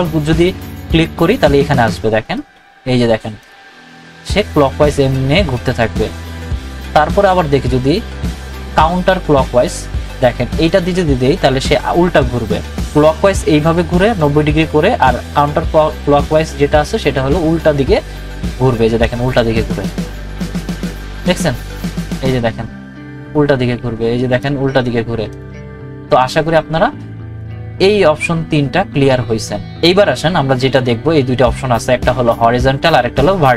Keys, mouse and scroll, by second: 2.2 right click, 3.4 click, 6.7 click, 6.7 right click, 18.6 right click, 20.2 click, 21.7 right click, 23.2 click, 24.3 right click, 25.3 click, 27.4 right click.